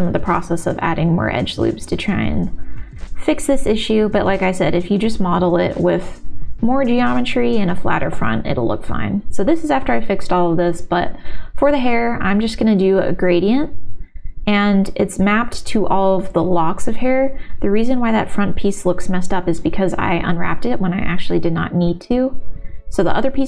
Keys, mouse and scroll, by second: 1.4 shift+middle click, 2.2 middle click, 3.1 g, 3.1 y, 3.3 click, 3.8 middle click, 4.3 middle click, 5.6 g, 5.6 y, 5.7 middle click, 6.3 shift+middle click, 6.6 middle click, 7.2 shift+middle click, 7.6 middle click, 9.9-11.1 middle drag, 11.3 shift+x, 12.1 ctrl+z, 12.5 click, 13.1 ctrl+z, 13.6 click, 14.7 shift+x, 15.3 ctrl+z, 16.0 click, 17.3 middle click, 17.6 click, 17.6 u, 18.0 u, 19.0 ctrl+KP_Add, 20.2 ctrl+z, 20.7 u, 23.3 l, 23.4 ctrl+s.